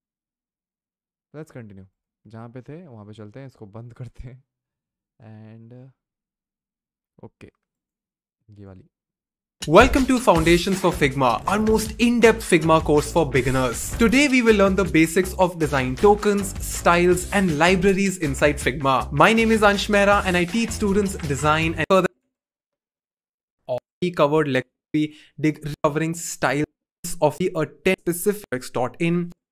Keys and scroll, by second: 23.6 typing.